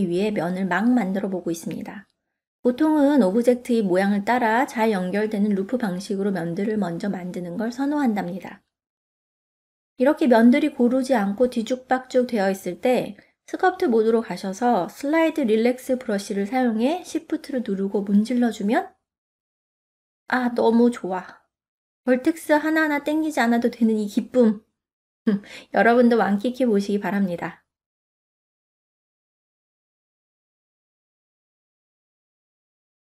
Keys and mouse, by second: 4.7 ctrl+middle click, 5.6 middle click, 8.4 ctrl+Tab, 10.9 click, 13.0-14.1 drag, 14.9 f, 17.3-19.2 drag, 19.5 middle click, 20.6-22.3 shift+drag, 22.4-23.8 middle drag, 24.0 shift+click, 25.0-26.3 middle drag, 26.8-31.0 shift+drag, 31.3-32.9 middle drag.